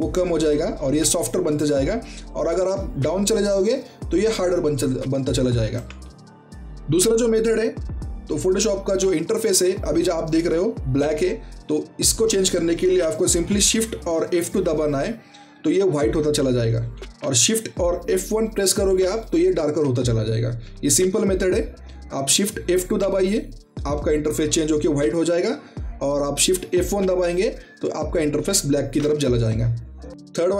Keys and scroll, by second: 14.4 shift+F2, 15.2 F2, 15.7 F2, 16.1 F2, 16.4 F2, 19.0 i, 21.7 shift+F2, 22.3 shift+F2, 22.7 shift+F2, 23.0 shift+F2, 26.7 shift+F1, 26.9 shift+F1, 27.2 shift+F1, 28.3 shift+F1.